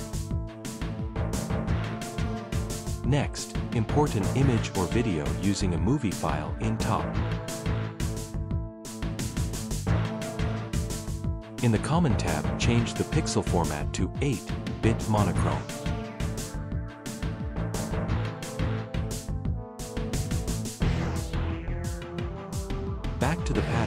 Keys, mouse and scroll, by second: 0.3 click, 1.6 click, 1.8 click, 4.0 v, 5.2 click, 5.5 click, 7.1 click, 15.5 click, 22.5 right click, 22.8 right click, 23.3 t.